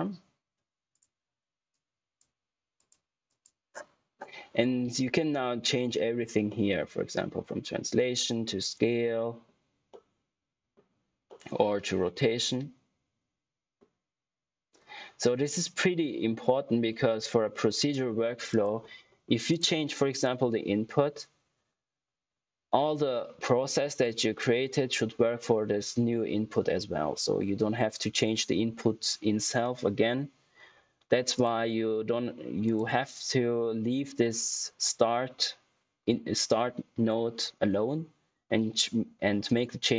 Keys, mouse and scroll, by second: 0.8 click, 6.4 middle click, 18.4 click, 31.3 click.